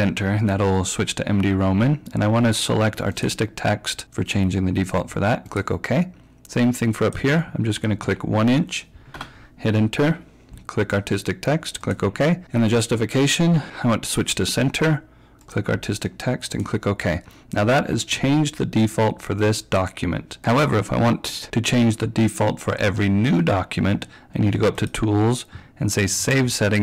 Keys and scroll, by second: 8.1 1, 9.2 Return.